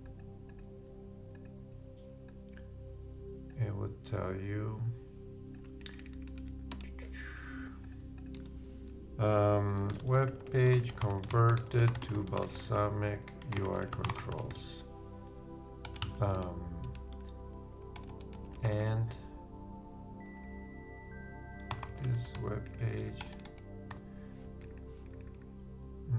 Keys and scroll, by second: 9.6-10.5 typing, 12.1 shift+space, 13.4 shift+space, 13.5 shift+u, 13.6 shift+space, 13.8 shift+c, 15.9 shift+BackSpace, 16.0 shift+i, 16.3 shift+Return, 17.1 shift+Return, 17.9 shift+BackSpace, 21.7 shift+t.